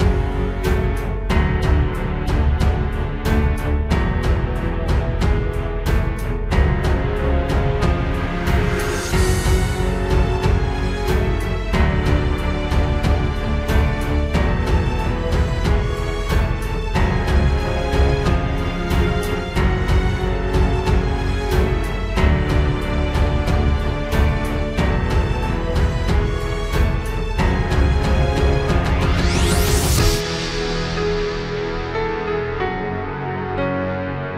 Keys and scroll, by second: 0.5 ctrl+space, 1.8 ctrl+space, 3.0 ctrl+space, 3.6 ctrl+s, 4.0 ctrl+j, 4.2 ctrl+t.